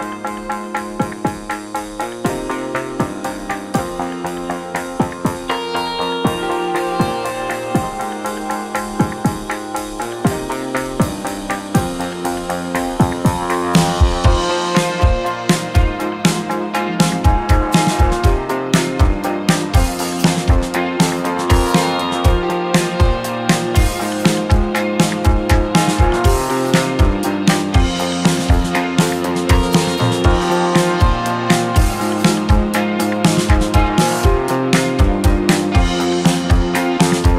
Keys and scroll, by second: 1.0 KP_1, 1.1 KP_Decimal, 1.1 KP_5, 3.6 KP_1, 3.7 KP_Decimal, 3.8 KP_5, 3.9 Return, 5.2 space, 7.2 space, 8.9 ctrl+[, 11.6 ctrl+[, 14.3 KP_1, 14.5 KP_0, 17.8 2, 23.4 1, 25.0 2, 26.4 3, 27.1 space, 28.8 space.